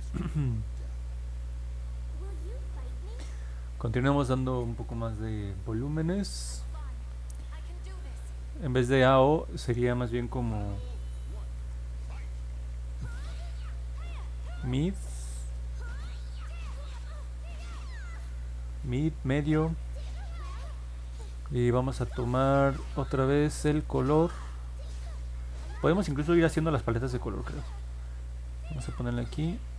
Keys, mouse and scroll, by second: 0.6 middle click, 1.1 middle click, 9.0 click, 12.4 i.